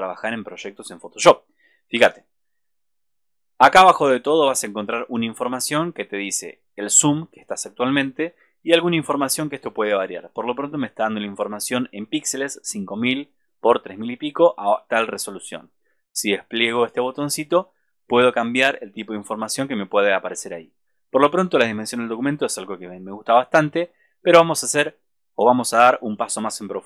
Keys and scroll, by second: 1.9 super+=.